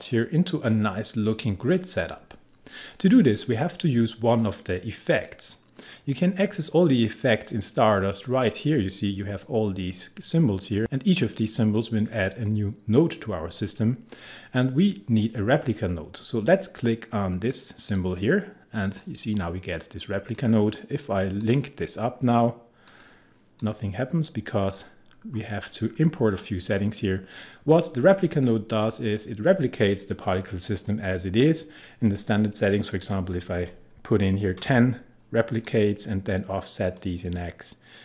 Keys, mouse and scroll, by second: 17.9-22.9 drag, 24.5-24.8 scroll down 1, 33.0 click, 34.3-35.2 typing, 35.6-38.0 drag.